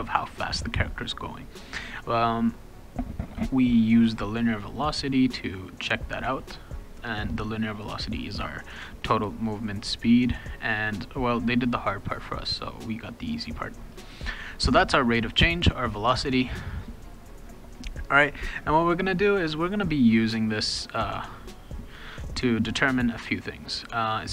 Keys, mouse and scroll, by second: 4.1 click, 4.3 click, 15.3 click, 15.5 click, 16.4 click.